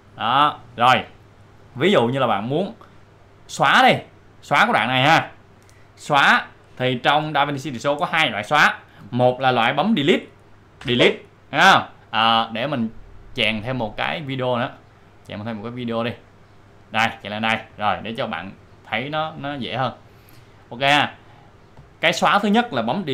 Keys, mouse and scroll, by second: 3.5-6.4 drag, 13.9-15.8 drag, 16.0-18.2 drag, 21.7 click.